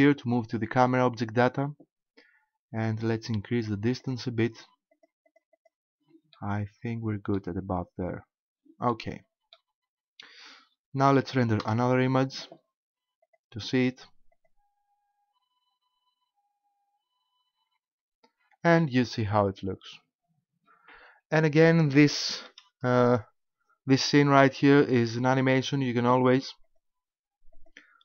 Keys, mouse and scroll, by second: 0.9 click, 3.5 click, 4.0 click, 4.5 click, 4.9 click, 5.3 click, 5.5 click, 6.3 middle click, 8.9 middle click, 9.3 middle click, 11.6 KP_0, 13.3 click, 14.3 click, 22.5 Escape, 24.7-25.4 scroll up 2, 26.7 click, 27.5 click.